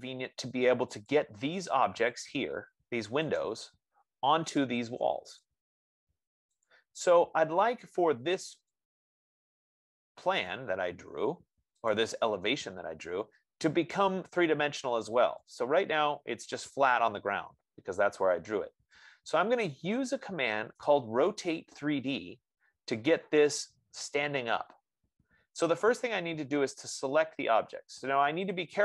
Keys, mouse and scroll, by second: 1.4 click, 2.5 click, 5.7 click, 6.9 click, 9.1 click, 12.3 click, 14.6-17.3 drag, 21.0-25.6 right drag.